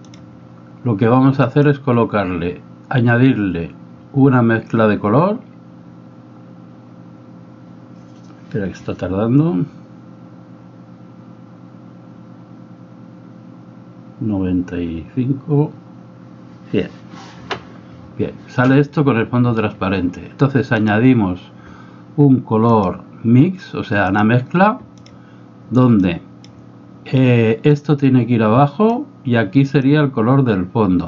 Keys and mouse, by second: 20.7-25.1 drag, 26.0 click, 27.8-29.1 drag, 29.9-31.0 drag.